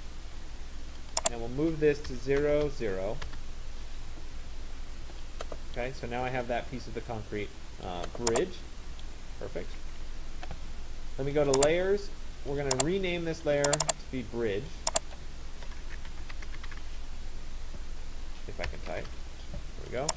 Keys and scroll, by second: 9.5 Escape, 18.4 BackSpace.